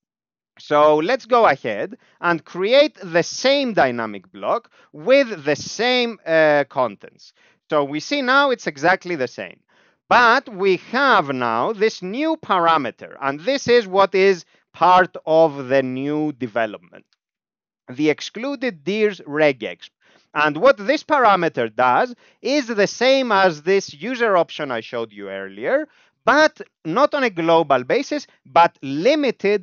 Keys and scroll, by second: 0.8 alt+x, 1.9 alt+p, 3.7 alt+x, 4.9 alt+p, 5.8 alt+x, 6.9 Down, 7.0 Down, 7.3 Down, 7.4 Down, 7.6 Down, 7.7 Down, 7.9 Down, 8.0 Down, 8.2 Down, 8.4 Up, 8.6 Up, 8.9 Up, 9.1 Up, 9.2 Up, 9.4 Up, 9.5 Up, 9.7 Up, 10.5 ctrl+s, 10.5-11.8 typing, 12.0 Right, 12.7 Left, 14.0 ctrl+alt+space, 17.6 Right, 19.4 ctrl+g.